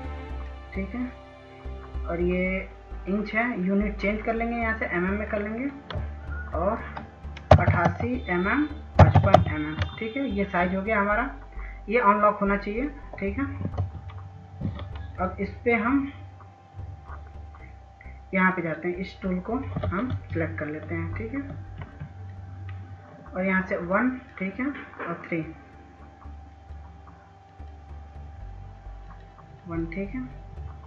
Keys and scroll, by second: 7.8 8, 7.9 8, 8.1 Tab, 9.2 5, 9.6 Tab, 14.0 F2, 20.4 ctrl+s, 20.6 ctrl+s, 21.7 ctrl+s.